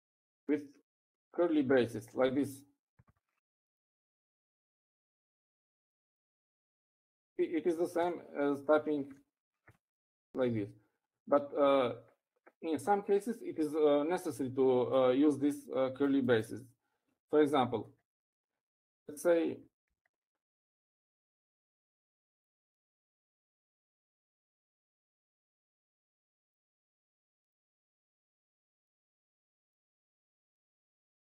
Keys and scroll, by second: 0.2 Up, 1.3 Up, 2.8 Left, 4.7 shift+[, 5.5 Right, 6.2 shift+], 8.7 Up, 9.5 ▯, 10.3 Left, 10.8 ▯, 22.3-29.5 typing.